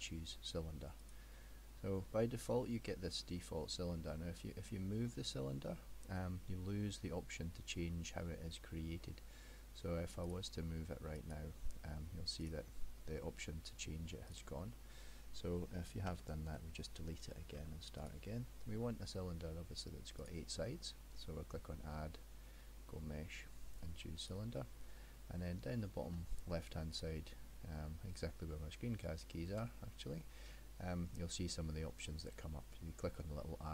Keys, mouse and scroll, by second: 10.3 click, 11.3 click, 12.5 click, 14.4 click, 16.3 ctrl+z, 17.6 x, 20.3 click, 27.0 click.